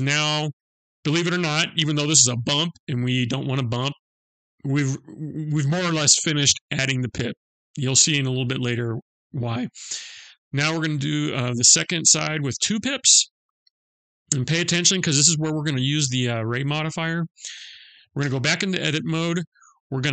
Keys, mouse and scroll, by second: 5.0 middle click, 13.4 click, 16.6 click, 17.7 Tab.